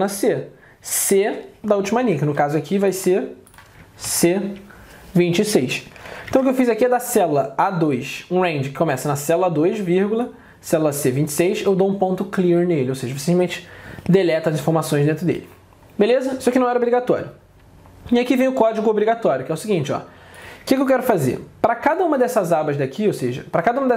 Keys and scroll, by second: 2.1 alt+Tab, 4.1 ctrl+Down, 6.4 alt+Tab, 21.1 alt+Tab.